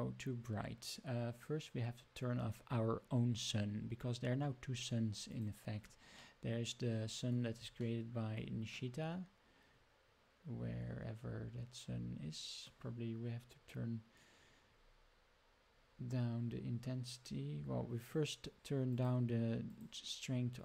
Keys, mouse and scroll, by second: 5.3 click, 6.2 middle click, 6.5 middle click, 6.7 middle click, 6.9 middle click, 7.8 shift+middle drag, 9.2 middle click, 9.5 middle click, 9.9-11.1 middle drag, 11.2 middle click, 11.3 middle click, 12.4 middle click, 12.6 middle click, 17.9 click, 18.9 click, 19.6 click.